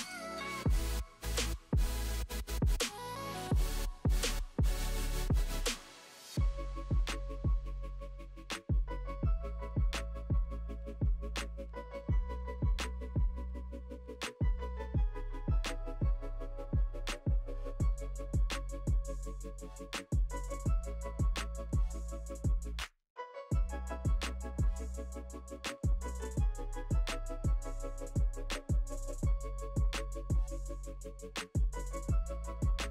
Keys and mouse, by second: 3.7-10.7 middle drag, 10.7 click, 10.9-12.2 middle drag, 12.2-24.1 drag, 14.6 middle click, 14.6 right click, 16.7 middle click, 16.7 right click, 17.9 middle click, 17.9 right click, 21.2 middle click, 21.2 right click, 24.1 middle click, 24.2-31.8 drag, 26.9 ctrl+x, 28.6 ctrl+z, 29.1 ctrl+z, 31.8 middle click, 31.9-32.9 drag.